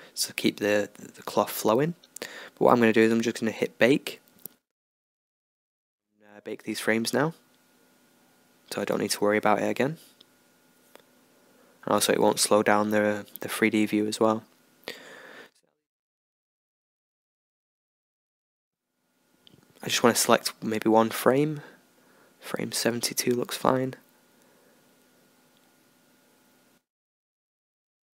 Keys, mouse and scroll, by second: 11.9-13.8 drag, 19.5 s, 21.6 e, 24.0 Right, 24.2 e, 24.4 Left, 25.1 Right, 25.4 Left.